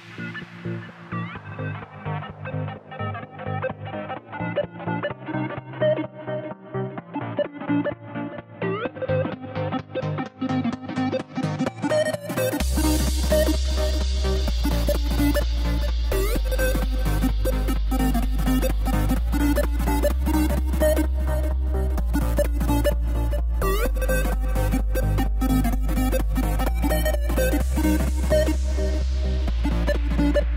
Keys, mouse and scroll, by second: 1.4 i, 2.6 i, 6.3-12.1 drag, 15.1-17.7 drag, 19.6-26.3 drag.